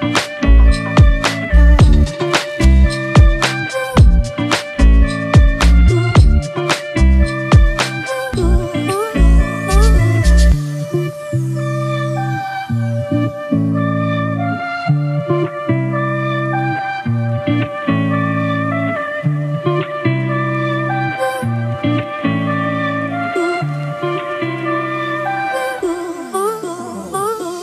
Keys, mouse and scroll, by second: 1.1 double click, 4.9 double click, 25.8 ctrl+t, 26.7 alt+shift+click.